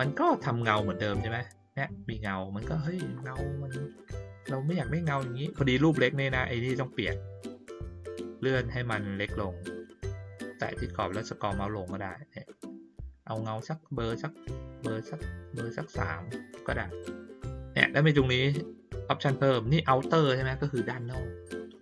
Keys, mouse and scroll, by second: 1.1 click, 8.1 middle click, 8.1 scroll down 1, 9.4 middle click, 9.4 scroll down 1, 10.0 middle click, 10.0-10.5 scroll down 1, 10.6 middle click, 10.6-12.2 scroll down 2, 11.1-15.1 middle drag, 12.2-15.1 scroll up 1.